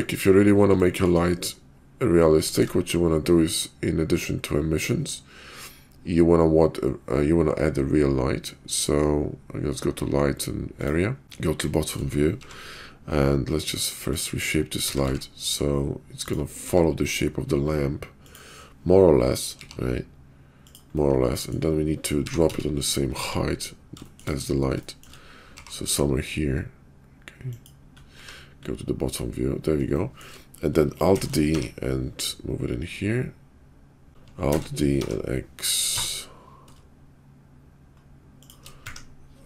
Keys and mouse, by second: 2.5 shift+a, 11.2 `, 11.2 KP_5, 11.8 shift+middle click, 12.4 g, 14.8 s, 16.6 s, 19.6 g, 21.0 middle click, 21.1 click, 21.2-21.5 middle drag, 22.2 g, 23.4 `, 24.8 shift+click, 25.6 g, 30.1 shift+middle click, 31.1 alt+d, 34.1 ctrl+h, 34.1 ctrl+z, 34.1 ctrl+g, 34.5 alt+d.